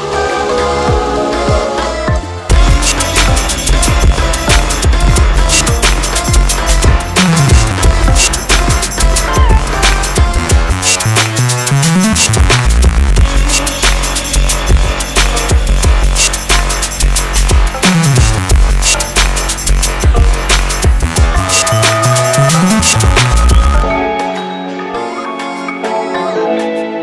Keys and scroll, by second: 20.9 ctrl+z, 23.8 Delete, 24.6 F4, 25.1 Delete.